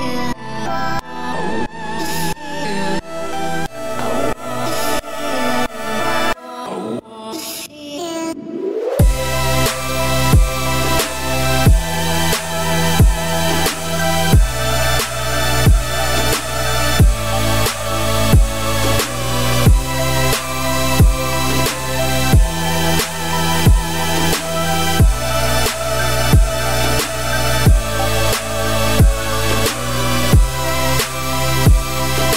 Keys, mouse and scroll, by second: 1.0 scroll up 1, 1.0 Tab, 1.5 a, 2.1 middle click, 2.4 3, 2.5 click, 3.0 middle click, 3.6 shift+click, 4.3 shift+click, 4.7 scroll up 1, 5.2 alt+s, 7.1 scroll down 2, 7.2 middle click, 7.8-8.4 scroll up 2, 8.4-9.5 middle drag, 9.5 Tab, 10.1 shift+middle click, 10.6 click, 11.2 Tab, 11.5 click, 12.4 shift+click, 13.0-13.4 scroll down 1, 13.4-14.6 shift+middle drag, 14.6 shift+d, 15.8 p, 16.3 Tab, 16.5 click, 16.9 Tab, 17.3 `, 17.9 scroll down 1, 18.0 middle click, 18.9 1, 19.3 click, 20.1 shift+click, 20.7 shift+click, 21.3 x, 23.1 click, 23.7 shift+click, 24.1 g, 25.5 a, 25.7 middle click, 26.0-27.1 scroll up 2, 27.1-27.9 scroll up 1, 27.9-29.1 scroll up 1, 29.9 middle click, 30.5 s.